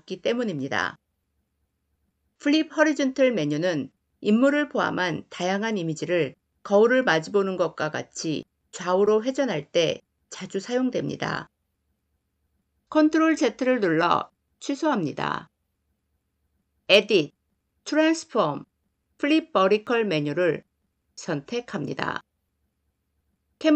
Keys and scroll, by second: 12.6 ctrl+z.